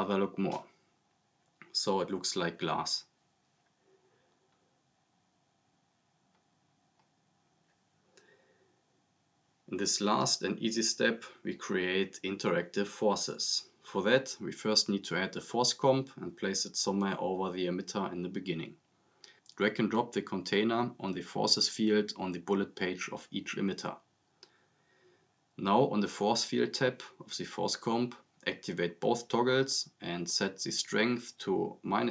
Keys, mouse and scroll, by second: 3.1 click, 9.3 scroll down 1, 9.6-10.0 drag, 11.0 scroll up 1, 11.4 click, 12.5-13.4 typing, 14.2 click, 15.6 scroll down 1, 16.8-19.2 drag, 26.0-26.9 drag.